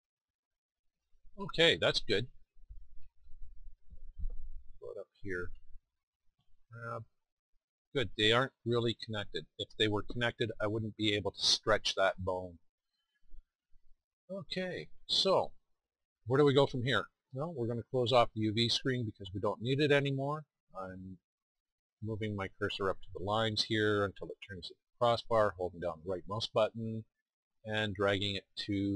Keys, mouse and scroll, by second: 0.1 middle click, 0.7 click, 6.6 g, 6.9 middle click, 7.2 middle click, 13.6 middle click, 14.3-17.0 drag.